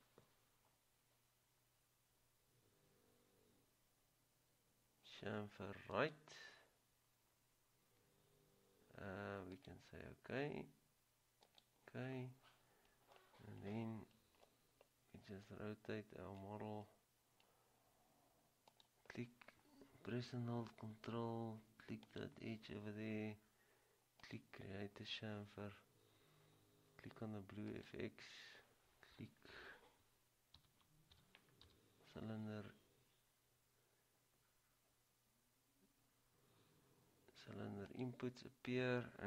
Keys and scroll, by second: 30.7-31.8 typing.